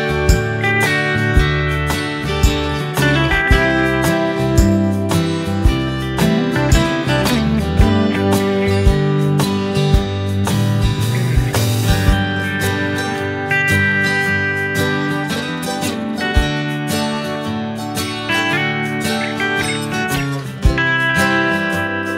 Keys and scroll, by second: 7.3 Delete.